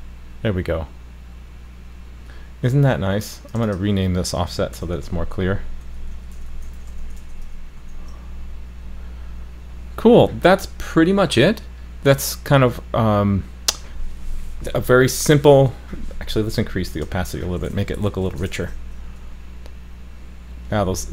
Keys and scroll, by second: 4.8 super+d, 7.8 super+s, 18.5 super+s.